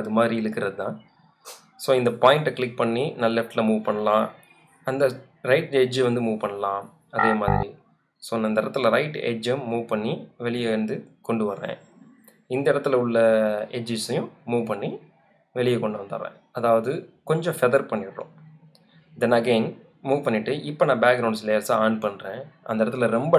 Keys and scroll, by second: 17.9 Return, 19.5 v.